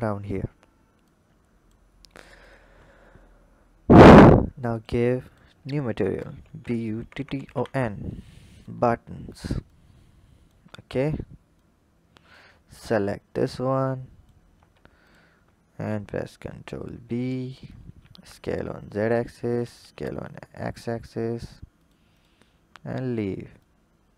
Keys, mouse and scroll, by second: 0.8 click, 2.3 drag, 3.7 click, 4.5-6.9 drag, 6.9 t, 9.5 click, 10.5-11.5 scroll down 1, 11.5 click, 12.6 click, 13.4 click, 14.4 Tab, 14.9 alt+click, 15.8 ctrl+b, 17.4 Tab, 17.8 s, 19.6 s, 22.0 click, 22.6-23.4 scroll down 5, 23.4 click.